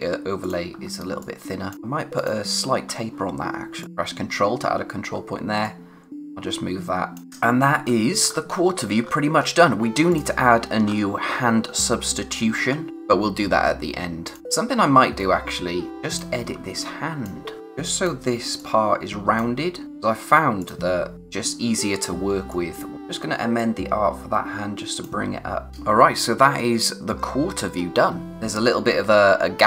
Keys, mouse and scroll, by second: 0.7 scroll down 1, 1.0 space, 1.2 click, 1.5 space, 1.7 click, 2.9-3.8 scroll up 1, 3.8 click, 5.6 click, 7.2-7.8 scroll up 1, 10.1 click, 10.8 scroll up 1, 12.9 click, 14.8-15.1 scroll up 1, 15.9 click, 16.5-16.8 scroll down 1, 16.8 click, 25.7-27.5 scroll down 1, 28.2 scroll up 1.